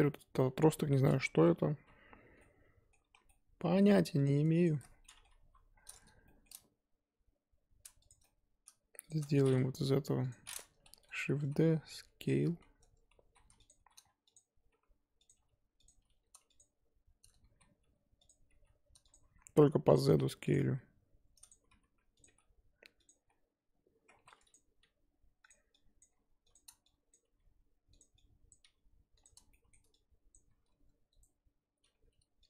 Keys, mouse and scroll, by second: 0.0 middle click, 0.7-1.3 scroll down 2, 1.3 KP_1, 2.2 Tab, 2.4 middle click, 3.0 3, 3.2 middle click, 4.2 click, 4.6 shift+click, 4.9 scroll down 1, 5.0 middle click, 5.4 KP_1, 5.7-6.2 scroll up 4, 6.2 shift+middle click, 6.5-8.1 scroll up 2, 8.1 shift+click, 8.2 middle click, 9.1 shift+click, 9.2 middle click, 9.9 KP_1, 10.2 click, 10.9-15.9 typing, 17.4 g, 17.4 s, 18.5-22.2 typing, 23.1-24.1 scroll up 2, 24.1 1, 24.5 click, 24.8 g, 26.0 click, 26.1 g, 27.1 click, 27.2 g, 28.5 click, 28.6 g, 29.5 shift+middle click, 30.3 click, 30.5 r, 31.9 e.